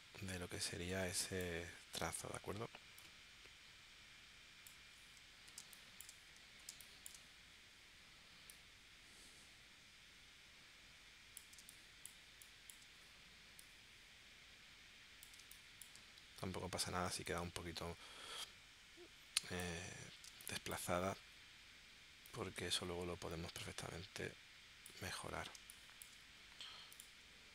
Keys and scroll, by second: 5.6 space, 6.7 space, 11.6 space, 15.4 space, 20.3 space, 25.6 space.